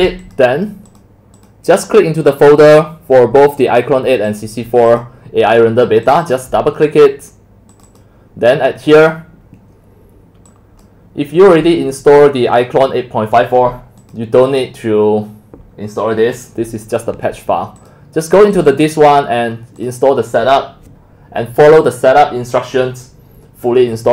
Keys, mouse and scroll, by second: 0.2 click, 0.9 click, 1.4 click, 2.3 click, 4.2 click, 4.9 click, 6.1 click, 6.3 click, 7.7 click, 7.8 click, 10.5 click, 11.7 click, 12.6 click, 14.0 click, 17.8 click, 18.5 click, 18.7 click, 19.8 click, 21.3-24.1 drag.